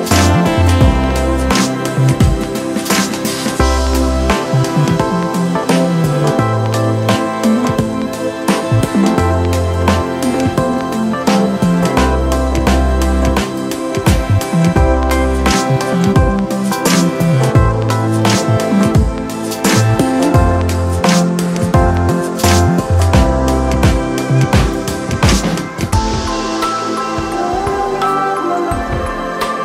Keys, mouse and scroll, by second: 17.3 ctrl+d, 28.4 ctrl+=.